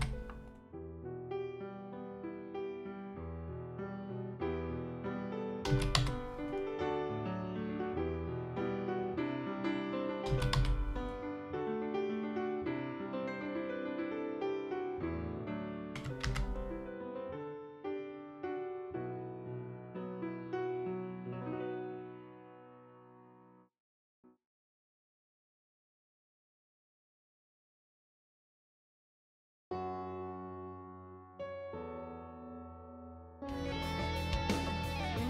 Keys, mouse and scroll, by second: 1.2-4.5 drag, 5.7 alt+a, 5.9 c, 7.1-9.0 drag, 10.3 alt+a, 10.5 c, 11.7-15.1 drag, 15.1 KP_5, 15.1 KP_1, 16.2 ctrl+b, 22.4 click, 22.6 click, 22.9 click, 23.3 click, 26.5 click, 28.9 click, 30.2-33.7 middle drag.